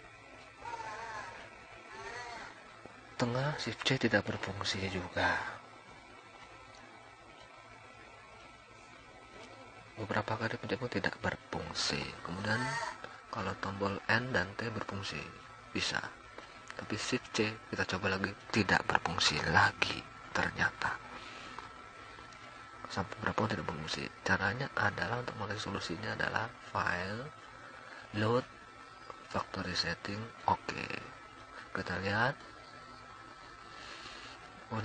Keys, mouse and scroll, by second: 0.5-1.7 drag, 2.0 click, 2.1-2.5 drag, 3.8 middle click, 5.3 middle click, 7.3 shift+c, 8.3 shift+c, 8.7 shift+c, 8.8 shift+c, 11.2-14.7 typing, 16.5 n, 17.5 n, 18.0 n, 20.0 t, 20.0 n, 21.5-26.8 typing, 29.5 shift+c, 29.9 shift+c, 30.2 shift+c, 32.0-33.0 drag.